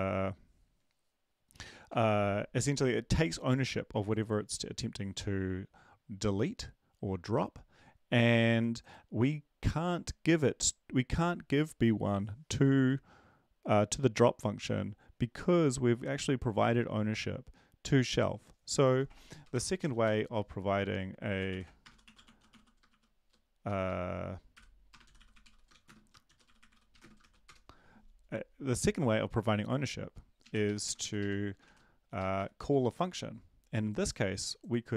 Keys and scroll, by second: 19.4 Return, 19.5 Return, 19.7-20.4 typing, 22.0-23.4 typing, 24.5-27.7 typing, 30.8 Up, 30.8 Right, 31.2 Right, 31.6 typing, 32.2 Right, 32.3 Right, 32.6 Down.